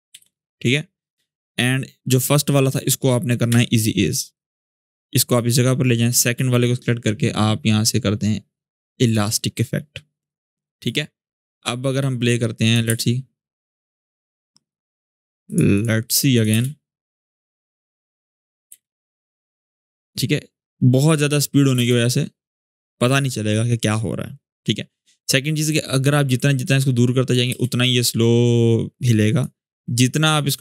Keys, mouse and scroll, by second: 1.8-2.8 drag, 3.2 F9, 4.1-5.4 drag, 5.7-6.3 drag, 8.8-12.7 drag, 12.6 space, 14.5 click, 16.3 space, 17.8-18.4 click, 18.4 space, 19.7-21.6 drag, 21.5 space, 23.2-24.5 drag, 25.8-27.3 drag, 27.3 space, 29.0-30.6 drag.